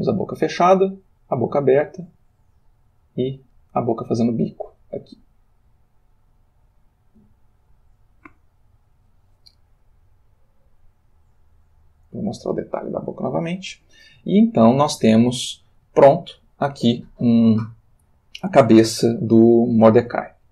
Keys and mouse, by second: 0.6 Right, 1.6 Right, 4.1 Left, 5.7 Right, 6.7 Right, 7.7 Left, 8.4 Left, 11.7 click, 14.1-15.6 ctrl+middle drag, 16.1 shift+middle click.